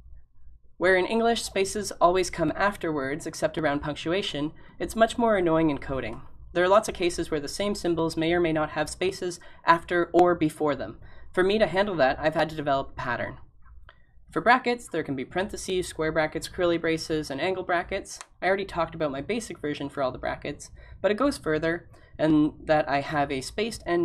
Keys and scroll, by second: 12.6-13.4 typing.